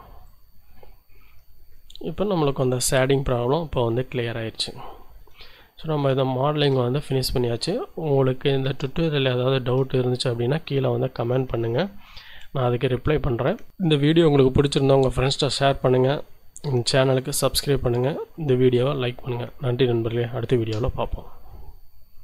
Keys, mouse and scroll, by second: 0.2 click, 1.3 Tab, 2.1-4.1 shift+drag, 4.1 scroll down 2, 5.4 shift+right click, 6.2 shift+right click, 7.4 right click, 8.7-10.2 shift+middle drag, 12.7 middle click.